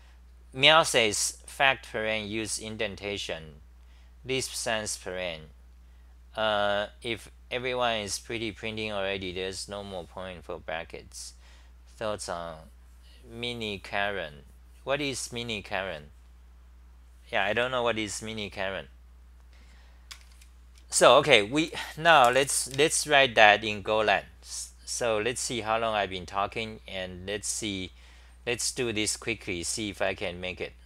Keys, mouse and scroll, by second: 17.9-18.6 typing, 18.1 scroll up 8.